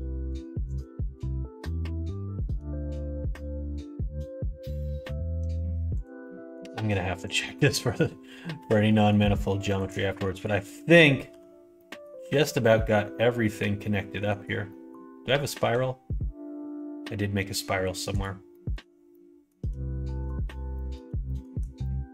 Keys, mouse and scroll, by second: 0.7 click, 1.6 middle click, 2.4 shift+click, 2.8 f, 3.2-5.5 middle drag, 5.9 click, 6.2 middle click, 7.6 middle click, 8.5 f, 8.8 middle click, 9.7 click, 10.3 shift+click, 11.2 f, 11.7 middle click, 12.2 ctrl+r, 14.6 middle click, 15.5 ctrl+r, 18.5 middle click, 19.0 shift+middle click, 20.7 middle click, 21.2 shift+middle click, 21.8 middle click.